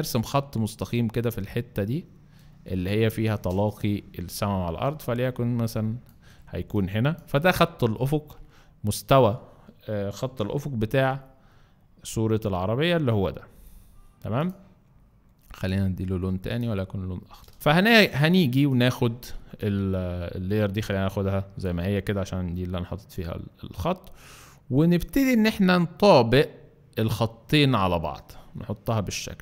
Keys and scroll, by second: 0.3 shift+space, 6.4 space, 10.2 v, 11.1 Up, 11.3 Up, 13.0 Up.